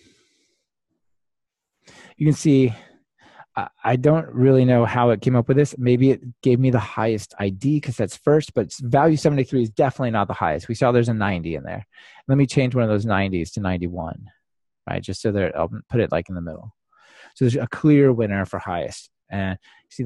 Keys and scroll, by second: 19.2 ctrl+r.